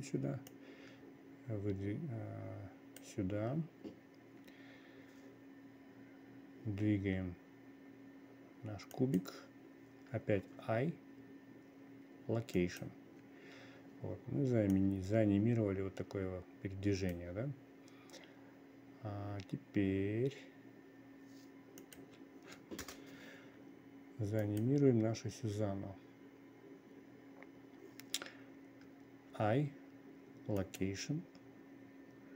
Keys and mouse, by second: 1.0-3.5 drag, 7.2 g, 11.0 i, 15.2-17.7 drag, 22.3-23.4 drag, 25.0 click.